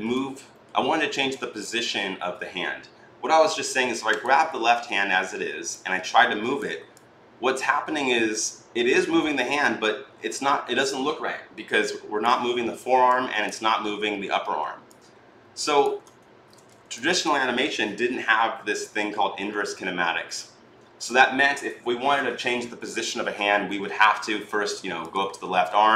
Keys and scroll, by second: 16.1 ctrl+z.